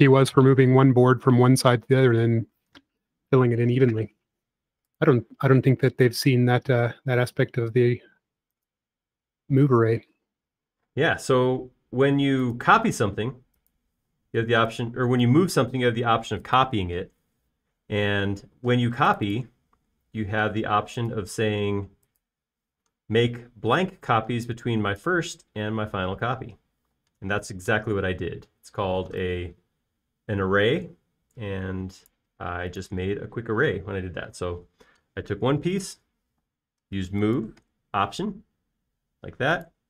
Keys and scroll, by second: 1.4-2.3 typing, 3.5 typing, 11.4 space, 11.9 l, 14.0 typing, 15.3 p, 17.0 space, 19.6 typing, 21.3 l, 23.6-24.3 typing, 26.7 space, 28.0 p, 33.9 space, 37.4 m.